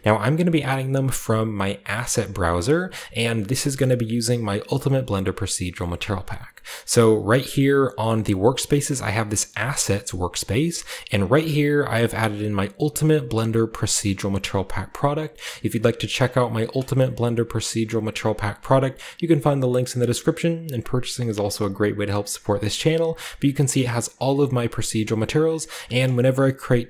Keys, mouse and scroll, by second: 1.0-9.5 scroll down 1, 9.5 click, 12.0 click, 12.5 click, 15.0 click, 16.4 click, 16.9-17.8 scroll down 2, 17.8-21.5 drag, 22.0 click, 22.4 click, 22.6-23.6 scroll down 3, 23.2 click, 23.6 click, 23.9 click, 24.2-24.6 scroll up 1, 24.6 click, 25.0 click, 25.5 click, 25.9-26.4 scroll down 1, 26.3 drag.